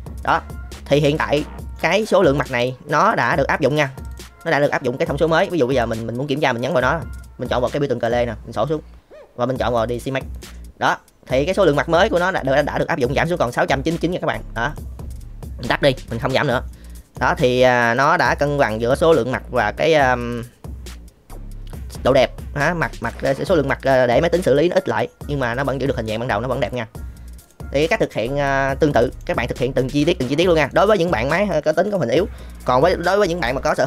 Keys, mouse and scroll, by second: 0.9-1.7 middle drag, 2.0 middle click, 2.3-3.0 drag, 3.0 middle drag, 3.6 middle drag, 7.9 click, 8.7-10.4 drag, 14.6 click, 16.1-16.6 middle drag, 16.9 middle drag, 17.6 middle click, 17.9 click, 18.1-23.0 middle drag, 26.0-26.6 middle drag, 27.4 middle click, 29.0 shift+middle click, 29.5 middle drag, 30.7 middle click.